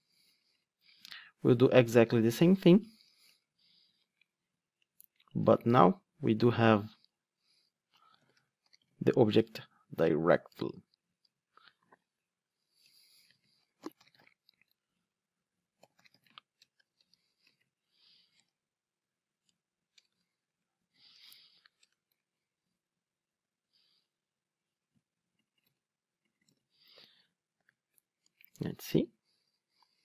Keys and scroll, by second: 2.8 alt+Return, 5.4 Return, 10.8 Return, 19.5 Return, 25.6 super+c, 26.7 super+v, 27.6 ctrl+r.